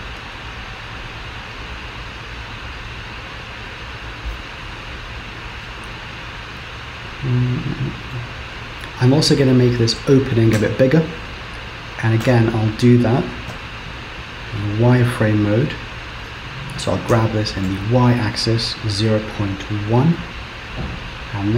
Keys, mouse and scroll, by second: 5.7 middle click, 8.9 middle click, 10.6 Tab, 12.3 KP_7, 12.9-13.5 scroll up 1, 13.5 z, 15.4-15.9 scroll up 2, 17.1 g, 21.1 click.